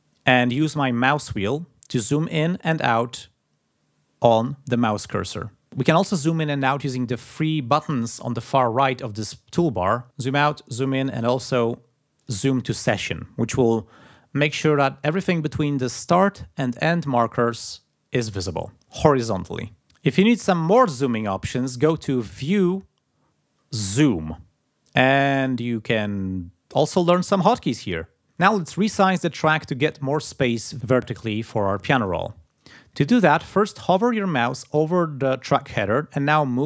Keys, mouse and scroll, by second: 1.2-1.8 ctrl+scroll up 2, 2.8-3.3 ctrl+scroll down 2, 3.3-3.9 ctrl+scroll up 2, 3.9-4.4 ctrl+scroll down 2, 4.9-5.5 ctrl+scroll up 2, 5.5 ctrl+scroll down 2, 10.0 click, 10.3 click, 12.1 click, 22.4 click.